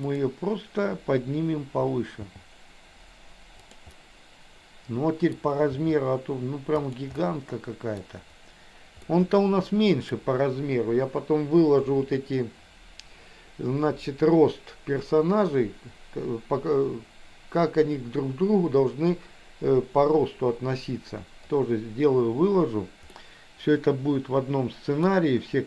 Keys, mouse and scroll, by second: 0.1 click, 2.3 g, 3.9-5.4 middle drag, 5.7 g, 7.2 middle click, 9.0-10.2 middle drag, 23.1 scroll up 1, 23.2-25.1 middle drag.